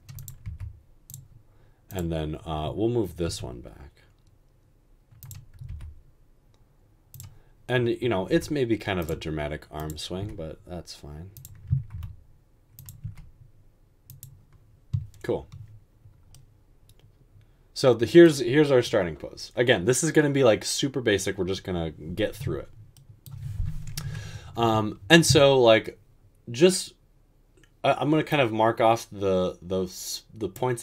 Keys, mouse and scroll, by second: 0.4 typing, 3.2 typing, 5.7 typing, 8.3 typing, 10.2 typing, 11.9 typing, 13.0 typing, 24.1-24.6 typing.